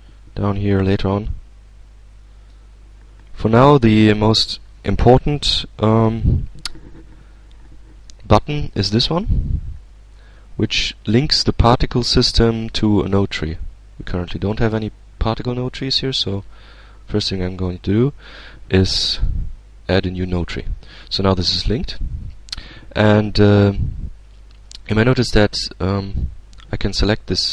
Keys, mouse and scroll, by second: 1.8-2.8 drag, 12.0 click, 15.7 click, 19.0 click, 25.9 click.